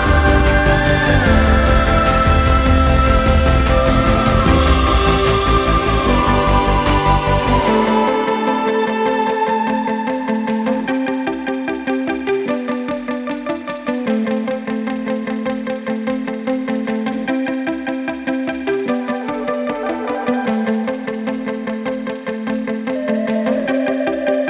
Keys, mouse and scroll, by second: 0.0 click, 2.2 ctrl+scroll down 2, 2.6-3.1 ctrl+scroll up 4, 7.2-8.0 drag, 8.4 right click, 9.4 click, 10.3 click, 11.0 click, 11.8 drag, 12.3 click, 12.7 ctrl+scroll down 1, 13.9-14.5 drag, 15.2 click, 15.8 click, 16.2 click, 17.2 click, 17.8 click, 18.4 click, 19.2 click, 19.4 click, 20.4 click, 21.5 click, 21.8 click, 22.4 click, 23.7 click, 24.1 click, 24.3 click.